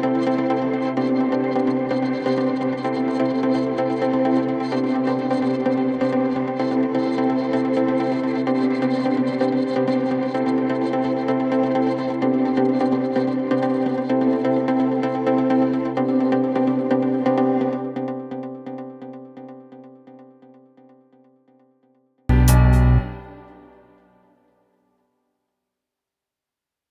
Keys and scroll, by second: 0.6 ctrl+z, 11.9 ctrl+z, 17.1 ctrl+r, 18.5 ctrl+r, 23.7 F9, 25.4 F9.